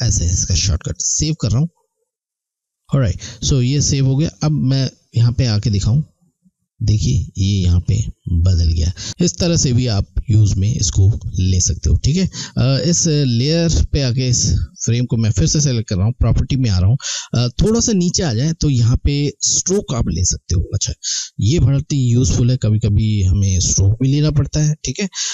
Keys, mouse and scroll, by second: 0.9 click, 5.5 click, 12.2 click, 15.6 click.